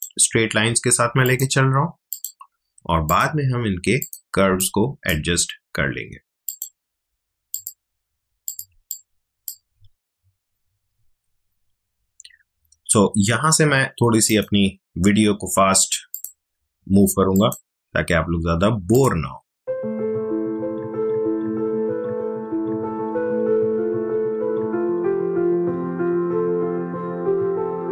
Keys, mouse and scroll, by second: 4.5 space, 4.5 click, 4.9 space, 6.4 click, 8.7 space, 8.9 click, 9.2 space, 10.0 alt+scroll up 1, 10.2 alt+scroll down 1, 14.2 click, 23.1 ctrl+z, 23.8 click, 24.0 space, 24.1 click, 24.3 space, 26.5 click, 26.7-27.9 typing, 26.7 click, 27.3 click.